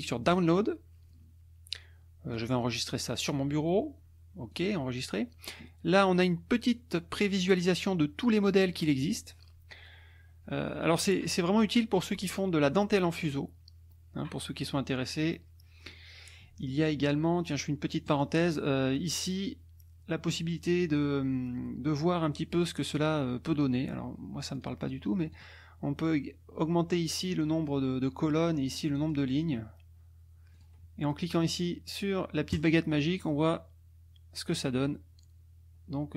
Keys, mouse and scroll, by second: 0.3 click, 2.3 click, 4.5 click, 13.9-14.4 scroll up 2, 15.2-15.5 scroll down 1, 15.9-18.1 scroll down 1, 18.1 click, 24.6 click, 25.3 click, 28.8 click, 30.5 click, 32.5 click, 36.0 scroll up 1.